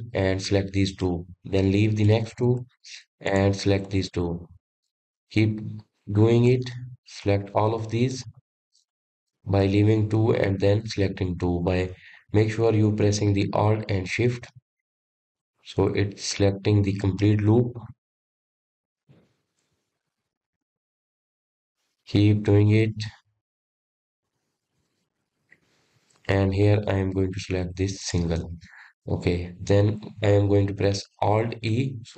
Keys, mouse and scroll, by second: 1.3 alt+shift+click, 2.2-4.5 middle drag, 4.5 alt+shift+click, 5.1 alt+shift+click, 5.5-7.7 middle drag, 7.7 alt+shift+click, 8.2 alt+shift+click, 8.6-10.1 middle drag, 10.1 alt+shift+click, 10.6 alt+shift+click, 11.1-14.2 middle drag, 16.6 alt+shift+click, 18.0 alt+shift+click, 18.4-19.6 middle drag, 19.6 alt+shift+click, 20.0 alt+shift+click, 20.5-22.4 middle drag, 22.4 alt+shift+click, 22.9 alt+shift+click, 23.3-25.5 middle drag, 25.5 alt+shift+click, 25.9 alt+shift+click, 26.3-29.3 middle drag, 29.3 alt+shift+click, 29.9-32.1 middle drag.